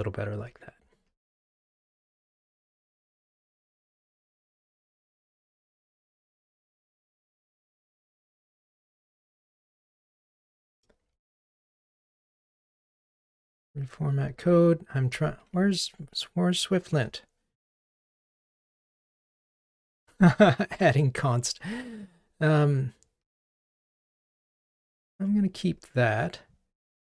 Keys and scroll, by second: 1.1 ctrl+r, 4.5 super+a, 5.3 alt+super+l, 9.8 super+z, 12.7 alt+super+l, 14.5 super+z, 18.4 Escape, 24.1 ctrl+r.